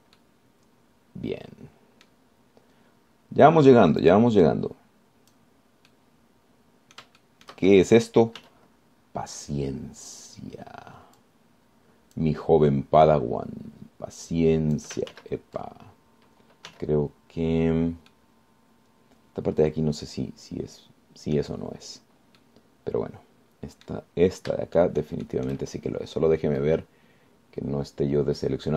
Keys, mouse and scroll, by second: 0.4 click, 1.4-3.5 middle drag, 5.2 click, 5.6-6.8 drag, 7.1-8.4 middle drag, 9.6 z, 12.4-13.6 drag, 14.3-16.2 drag, 16.3 ctrl+z, 17.4 scroll down 2, 17.9 z, 18.9-19.2 scroll down 2, 19.3-22.8 drag, 23.6-25.3 drag, 25.8 shift+scroll up 1, 26.0 shift+click, 26.7 shift+scroll up 1, 26.9-27.6 shift+scroll down 1, 27.8-28.7 drag.